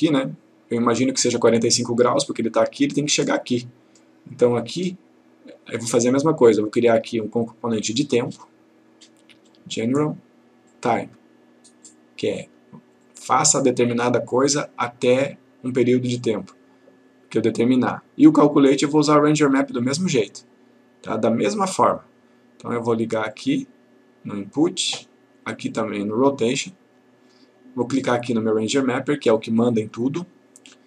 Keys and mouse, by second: 6.8 right click, 10.7 click, 14.4 right click, 19.9 click.